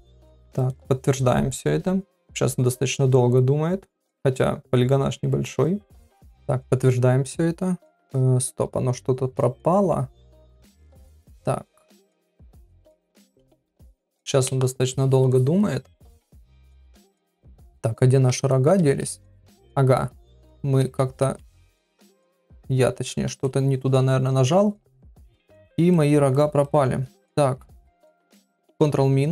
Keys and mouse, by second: 6.0-15.8 drag, 18.3 x, 18.8 shift+middle click, 19.4 middle click, 20.3 ctrl+z, 20.8 ctrl+z, 21.9 ctrl+z, 23.9 ctrl+z, 24.9 ctrl+z, 25.9 click, 27.8 click.